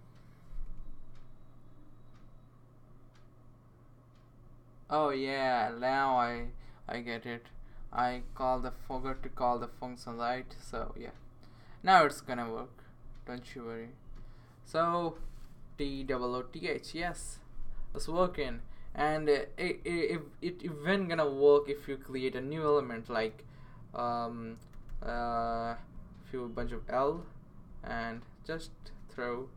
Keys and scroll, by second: 8.4 typing, 15.3-16.8 typing, 24.9-27.1 typing, 28.8 BackSpace.